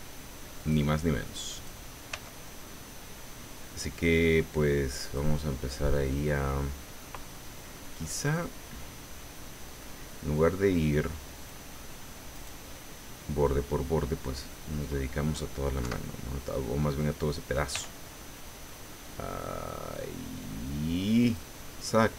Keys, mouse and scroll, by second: 0.6 click, 1.5 right click, 2.1 g, 3.8 scroll down 2, 5.0 click, 5.6-6.0 scroll down 2, 6.1-7.2 middle drag, 7.3 middle click, 8.3-10.0 middle drag, 11.3 click, 12.3 right click, 12.7 middle click, 15.8 KP_7, 17.7 g, 21.2 click, 22.0-22.1 drag.